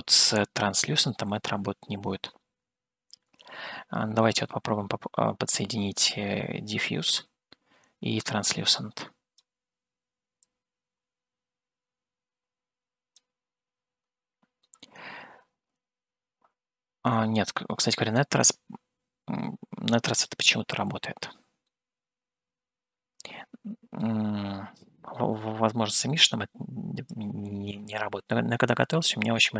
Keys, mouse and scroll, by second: 2.9 scroll down 1, 3.7 middle click, 7.4-9.4 drag, 10.7-13.5 drag, 15.1-18.1 middle drag, 21.8-24.2 middle drag, 25.5 middle click, 27.3-29.5 drag.